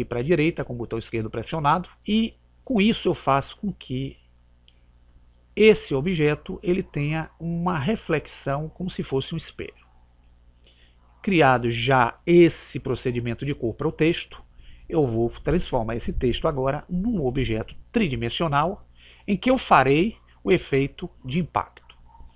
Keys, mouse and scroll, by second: 3.5 click.